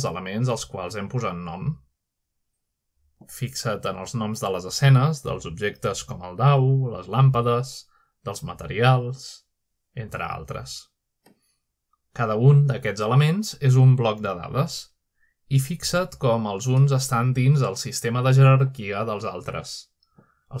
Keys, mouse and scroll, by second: 0.4 click, 3.0 click, 4.0-6.6 scroll up 1, 7.4 click, 11.6 click, 15.0 click, 15.6 click, 16.6 click, 17.5-18.0 scroll down 1, 18.0-20.2 scroll down 1, 20.2-20.6 scroll down 1.